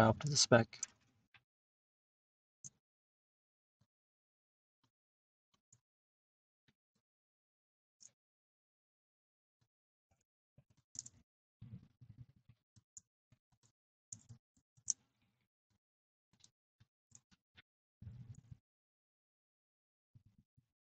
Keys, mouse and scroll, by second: 1.5 click, 3.9 click, 4.4 scroll down 1, 4.5-4.9 scroll, 5.4 scroll down 10, 5.5 scroll, 6.3 scroll, 9.6 click, 10.8 click, 12.7 click, 13.6 click, 15.7 click, 16.4 click.